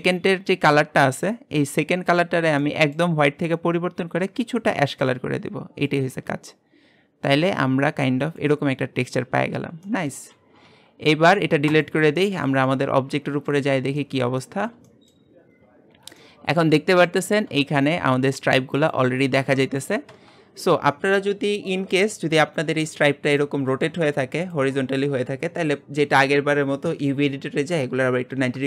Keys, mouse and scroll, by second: 2.2-2.6 drag, 2.6-3.8 scroll down 1, 3.8-4.4 drag, 5.9 click, 8.8-9.9 scroll down 16, 9.9-11.8 middle drag, 11.8 x, 12.2-15.2 shift+middle drag, 13.7-14.0 scroll up 4, 15.2-15.9 scroll up 7, 15.9-16.2 scroll down 3, 16.2-28.6 shift+middle drag.